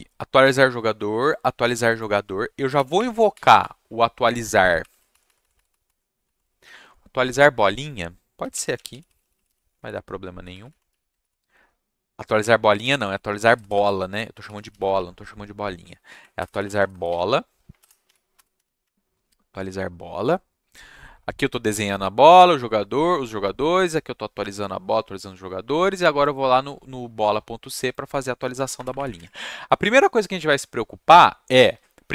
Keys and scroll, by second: 2.7 ctrl+shift+Down, 2.9 Up, 3.6 Right, 4.5 Right, 4.8 Left, 5.1 shift+Right, 5.2 shift+Right, 5.4 shift+Right, 5.5 shift+Right, 5.7 shift+Right, 5.8 shift+Right, 6.2 shift+Right, 8.2-9.9 typing, 10.5 Right, 10.6 Right, 10.9 Left, 11.2 ctrl+shift+Right, 12.6-15.1 typing, 16.1 Right, 16.3-19.1 typing, 28.5 Tab, 28.7 Return, 28.8 Return, 28.9 Up, 29.1 Tab.